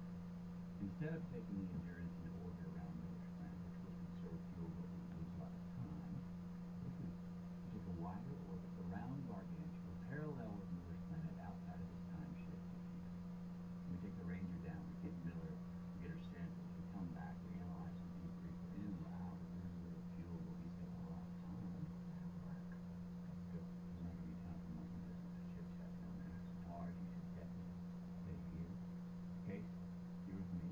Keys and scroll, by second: 9.0 shift+Down, 11.9 shift+Down, 12.8 shift+Down, 15.1 shift+Up, 16.2 Up, 18.3 Up.